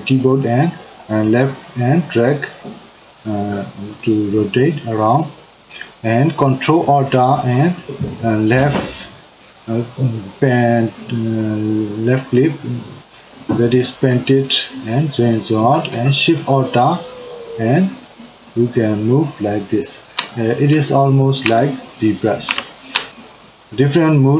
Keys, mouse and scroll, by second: 12.3-23.1 ctrl+middle drag.